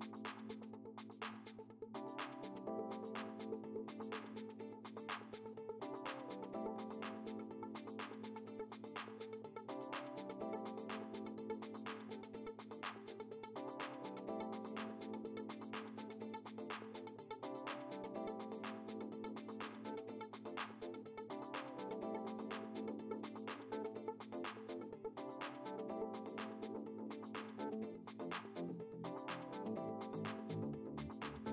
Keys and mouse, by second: 0.2 click, 2.1 ctrl+z, 3.9 click, 6.9 click, 9.2 Down, 10.3 Up, 11.6 Down, 15.0 Down, 15.9 Up, 17.6 click, 18.8 KP_5, 20.6 ctrl+a, 21.7 Delete, 23.9 click, 28.5 click.